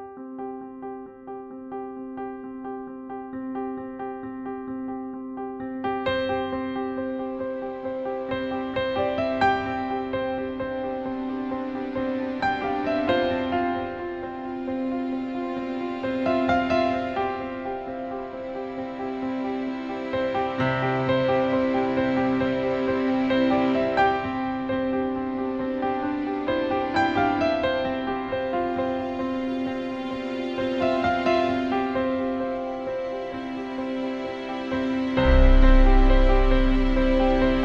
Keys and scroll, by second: 12.6 BackSpace, 13.6 BackSpace, 21.1-22.2 typing, 29.8 BackSpace, 30.3 BackSpace, 30.5 Page_Down, 35.5 BackSpace.